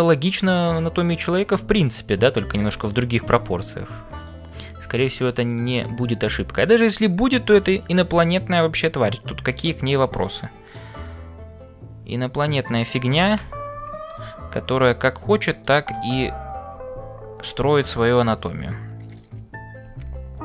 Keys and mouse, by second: 0.0-20.4 typing, 9.5 click, 12.6 click, 13.1 click, 15.6 click, 18.1 click, 19.0 click.